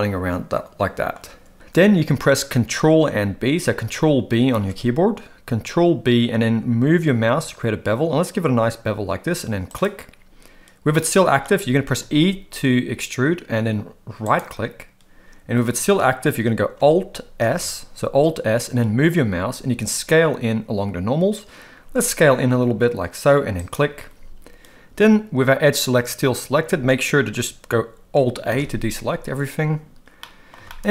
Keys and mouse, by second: 4.5 ctrl+b, 10.9 middle click, 12.0 e, 17.4 alt+s, 28.5 alt+a, 30.2 middle click, 30.6 shift+middle click.